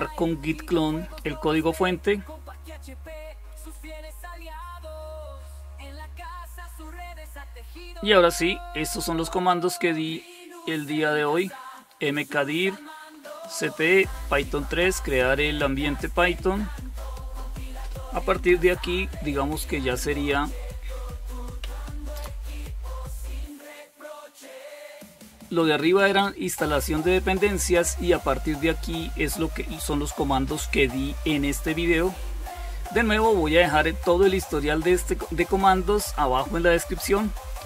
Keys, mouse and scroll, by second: 8.7-11.0 drag, 11.7-14.6 scroll down 1, 14.6-17.5 scroll down 1, 17.5-18.0 scroll down 1, 18.0 ctrl++, 20.8 ctrl++.